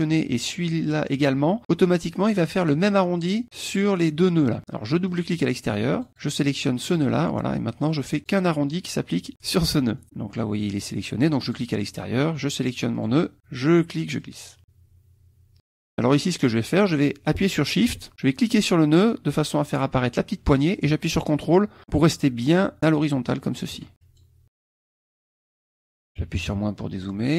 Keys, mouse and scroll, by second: 5.0 click, 5.9 click, 6.9 click, 7.8 click, 9.4 click, 10.0 middle click, 11.4 click, 12.9 click, 14.2-15.6 drag, 15.6 middle click, 18.6-23.8 shift+drag, 24.0 ctrl+shift+click, 24.4 click, 25.2 click, 26.2 KP_Subtract, 27.1-27.3 drag.